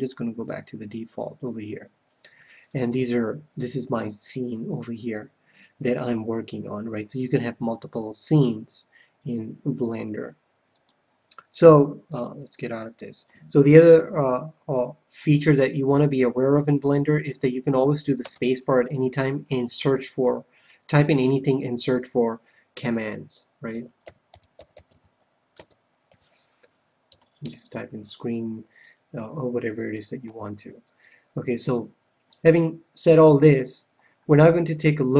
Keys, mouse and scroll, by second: 0.0 click, 2.5-4.2 drag, 18.1 space.